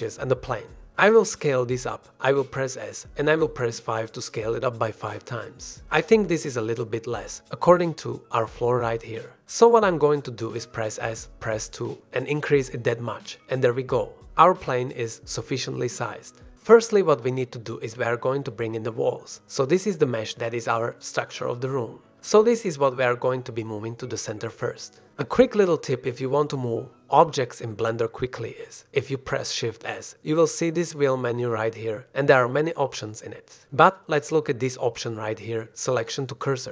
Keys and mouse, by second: 2.0 s, 4.2 KP_5, 6.0-7.5 drag, 7.5-9.1 middle drag, 9.9 s, 10.2 KP_2, 11.6 click, 13.5-13.8 middle drag, 13.9 shift+middle drag, 14.2-16.6 middle drag, 17.2 middle drag, 18.0 ctrl+click, 18.4 ctrl+s, 18.8 shift+drag, 19.2 drag, 19.7 shift+click, 20.3 drag, 21.6-22.7 drag, 23.0-23.5 shift+drag, 24.1 shift+middle drag, 24.2 shift+drag, 25.6 f, 25.9-26.2 middle drag, 26.2 click, 26.3 middle drag, 27.0-27.6 middle drag, 27.6 middle drag, 27.8-28.6 middle drag, 28.6-28.9 shift+drag, 31.1 shift+s.